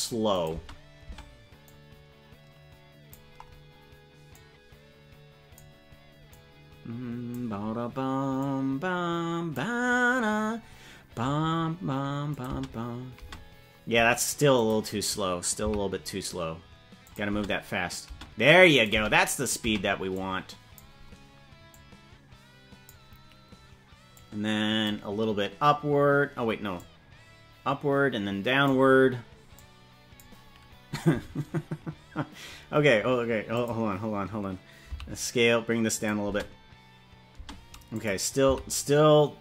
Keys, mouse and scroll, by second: 0.3 click, 0.5 space, 1.0 space, 1.6-3.1 drag, 4.3-5.5 drag, 6.3-7.3 drag, 8.3-9.5 drag, 12.3 click, 12.4 space, 13.2 space, 14.5 click, 15.6 s, 17.4 space, 18.0 space, 18.7 click, 18.8 space, 19.6 space, 20.1 click, 21.7-22.9 drag, 24.1 click, 26.7-28.6 drag, 29.5 click, 33.5 click, 34.8 s, 36.2 space, 37.4 space, 37.9 click, 38.4 s.